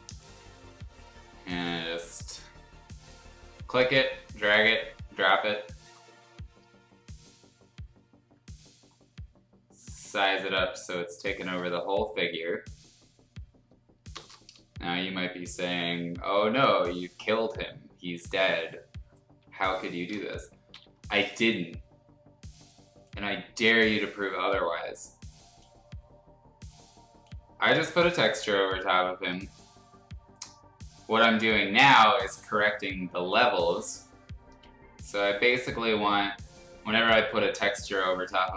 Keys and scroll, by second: 14.1 Return, 20.7 ctrl+l.